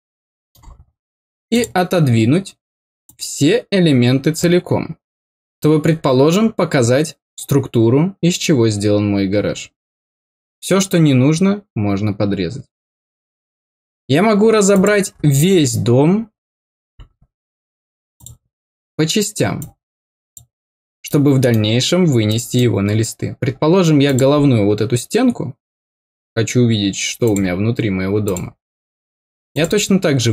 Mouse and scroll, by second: 1.5 click, 3.0-4.3 drag, 5.6-5.9 scroll down 4, 14.7 click, 18.1 click, 19.5 click, 21.0 middle click, 22.2 middle click, 24.0 click, 27.2 click, 28.2 click, 29.5 click.